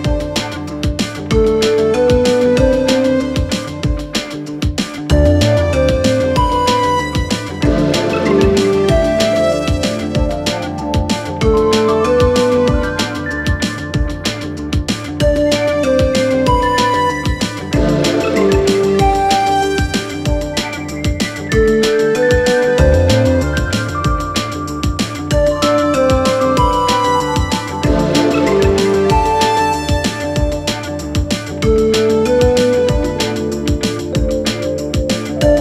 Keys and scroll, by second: 12.7 5, 27.7 ctrl+z.